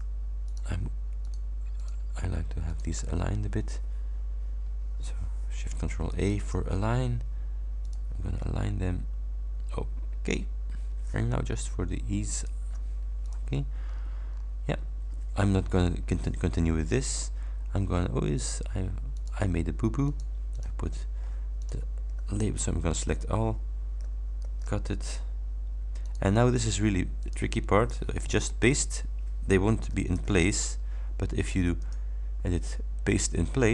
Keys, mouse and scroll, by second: 0.5 shift+click, 1.3 shift+click, 1.8 shift+click, 2.7 shift+click, 6.4 ctrl+shift+a, 7.9 click, 12.5 shift+click, 13.3 click, 14.0-14.7 scroll down 2, 19.3 click, 20.1 click, 20.7 click, 21.3 scroll up 1, 21.7 click, 22.5 ctrl+a, 24.5 ctrl+x, 26.1 click, 27.3 click, 28.5 ctrl+v, 30.2 ctrl+y, 31.9 click.